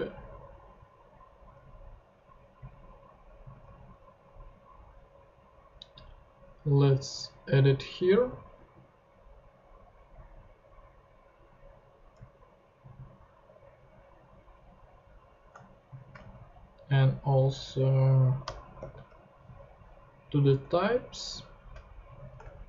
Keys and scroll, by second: 3.4 super+c, 3.6 super+Tab, 8.0 Return, 8.2 super+v, 12.1 Tab, 16.2 shift+super+c, 17.2 super+c, 18.4 Return, 18.8 super+v.